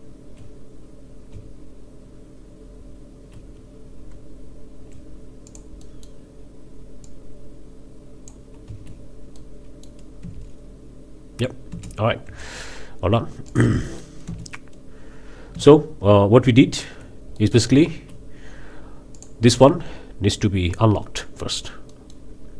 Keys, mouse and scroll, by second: 1.3 z, 4.1 Tab, 5.5-6.2 drag, 7.0-8.5 drag, 8.7 z, 9.4-10.0 drag, 10.2 space, 11.7 space, 12.2 Tab, 12.6 scroll down 2, 13.5-13.8 drag, 13.8 middle click, 14.2 space, 15.5 space, 16.0 Tab, 17.4-17.7 middle drag, 17.7 z, 18.5 scroll up 1, 19.1-19.4 drag, 21.9-22.3 middle drag, 22.3 scroll down 2.